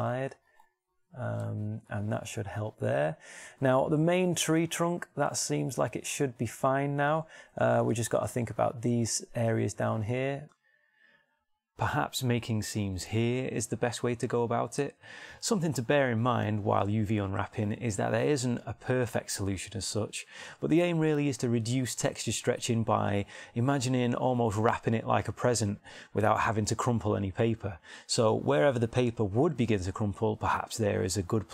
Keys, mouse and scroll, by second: 0.1 middle click, 1.1-3.3 middle drag, 5.2-7.2 middle drag, 8.0 shift+middle click, 22.7 middle click, 23.9 shift+middle click.